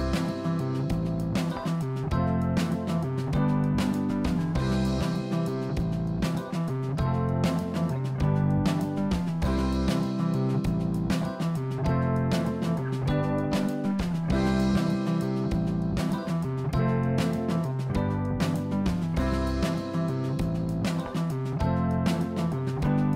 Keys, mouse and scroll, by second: 1.0 click, 1.6 Tab, 2.8 ctrl+r, 5.1 click, 5.6-6.0 scroll up 1, 6.3-8.0 middle drag, 8.5 ctrl+r, 10.0 click, 10.4-11.0 scroll down 2, 11.6-12.9 middle drag, 12.9 ctrl+r, 15.2 ctrl+r, 16.5 click, 17.1-18.8 middle drag, 20.3-21.5 middle drag, 21.5 Tab, 21.8 click, 22.1-22.6 scroll down 4, 22.7-23.1 middle drag.